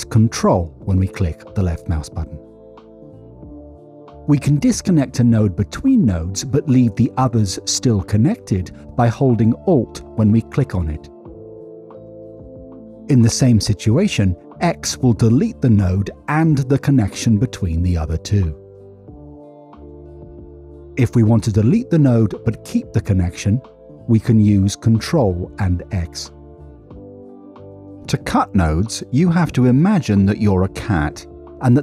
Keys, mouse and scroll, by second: 0.2 ctrl+click, 2.8 Escape, 4.3 middle click, 5.1 middle click, 6.4 click, 9.0 alt+click, 11.5 typing, 13.5 middle click, 13.8 scroll up 1, 14.5 middle click, 17.2 click, 18.6-18.9 typing, 21.2 middle click, 22.0 middle click, 24.6 click, 29.1 middle click, 29.3 middle click.